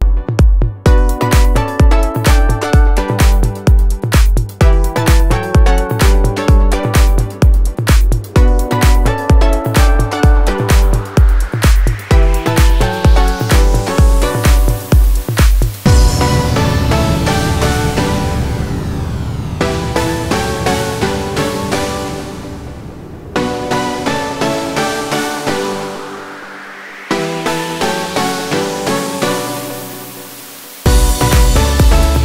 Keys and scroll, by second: 4.3 space, 4.7 F3, 5.0 Escape, 5.5 F2, 10.4 4, 10.6 9, 11.9 shift+4, 13.0 ctrl+space, 14.9 c, 15.0 e, 15.4 Escape, 24.6 c, 24.7 e, 25.1 Escape, 25.6 F3, 26.1 Escape, 27.3 F2, 31.6 shift+l, 31.8 shift+o, 32.0 shift+g, 32.0 shift+o.